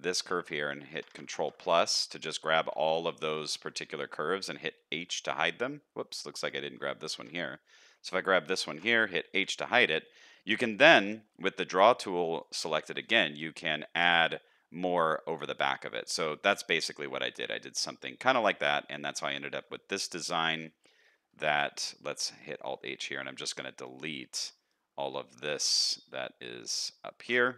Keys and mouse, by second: 0.9 ctrl+KP_Add, 5.0 h, 9.3 h, 12.8 shift+middle click, 13.5-15.8 drag, 15.8 middle click, 16.6 middle click, 17.3 middle click, 18.0 shift+middle click, 18.5 middle click, 19.4 shift+middle click, 20.4 shift+middle click, 21.3 shift+middle click, 22.5 alt+h, 22.8 middle click, 24.2 shift+middle click.